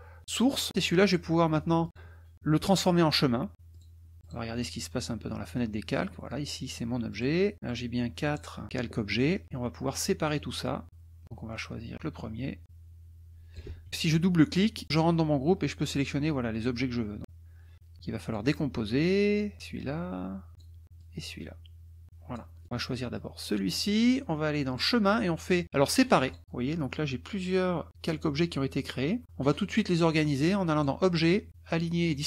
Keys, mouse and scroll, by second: 0.7 click, 1.8 click, 3.7 click, 4.2 click, 5.2 middle click, 7.1 click, 7.7 click, 8.2 click, 9.1 click, 9.1 middle click, 9.8 drag, 10.3 drag, 11.9 drag, 12.6-13.7 drag, 13.6 ctrl+z, 15.9-18.5 drag, 19.0-20.8 drag, 21.0-22.5 drag, 23.1 click, 24.7 click, 26.3 click, 30.7 click, 32.0 click.